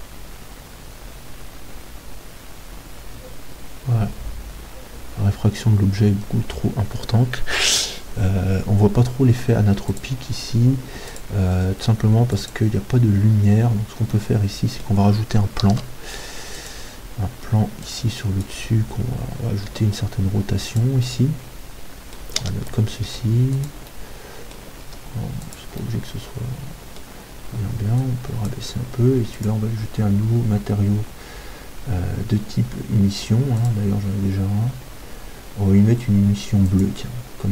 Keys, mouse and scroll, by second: 15.8 shift+a, 17.9-19.8 drag, 19.8 r, 20.8-22.9 drag, 21.0-22.9 middle drag, 23.1 g, 24.0-28.0 middle drag, 28.0-32.5 drag, 33.7-35.7 drag.